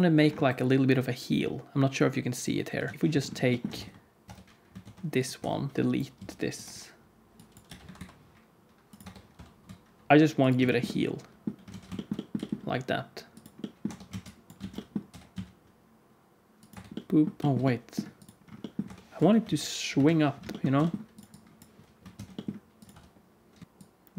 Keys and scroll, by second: 2.9 alt+a, 2.9 ctrl+s, 2.9 KP_1, 2.9 KP_3, 3.7 Tab, 4.2 Tab, 4.8 shift+d, 5.3 Tab, 5.7 alt+z, 5.7 x, 6.1 x, 7.6 g, 9.0 Tab, 9.3 r, 9.4 r, 10.1 g, 11.6 alt+z, 12.3 g, 13.8 Tab, 14.1 alt+z, 14.5 alt+z, 15.0 g, 16.6 Tab, 17.3 g, 17.4 alt+shift+z, 18.8 Tab, 19.1 KP_1, 19.4 alt+z, 19.9 KP_3, 20.7 g, 22.1 shift+d, 22.8 r.